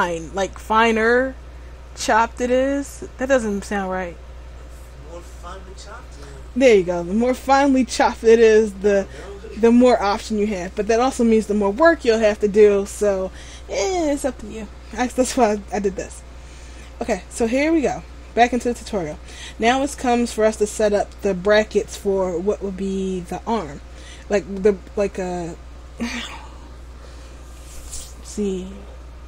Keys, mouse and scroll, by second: 15.6 scroll up 1, 16.3 shift+middle click, 16.3-16.6 scroll up 3, 17.5 middle click, 19.3 shift+middle click, 22.3-22.6 scroll down 2, 23.8-24.7 scroll up 1, 24.7-25.7 scroll down 1.